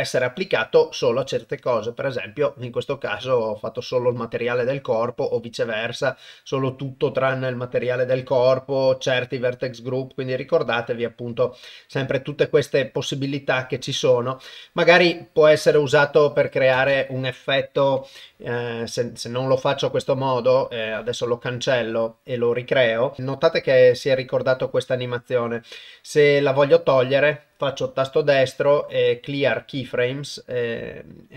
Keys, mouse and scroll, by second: 0.4-1.7 drag, 11.3-13.7 drag, 16.7 shift+space, 21.7 click, 26.9-29.9 drag.